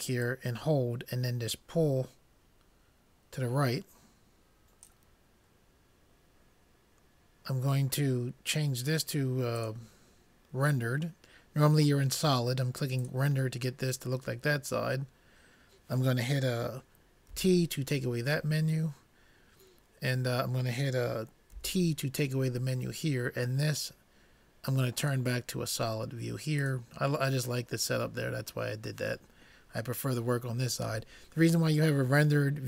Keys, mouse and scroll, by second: 0.3-2.1 drag, 17.4 t, 21.8 t, 25.3-26.8 drag.